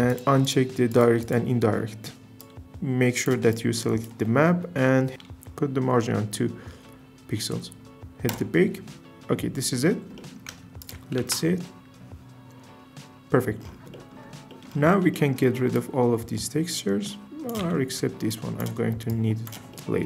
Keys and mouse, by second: 0.1 click, 0.4 click, 0.9 click, 1.2 click, 10.8 ctrl+shift+click, 11.2 z, 14.5 click, 15.7 drag, 17.6 x.